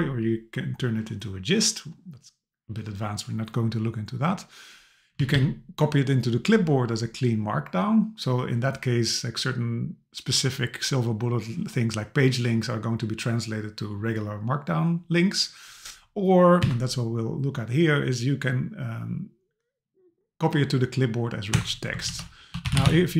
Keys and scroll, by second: 5.2 Down, 16.6 Down, 21.5 Return, 22.1 super+t.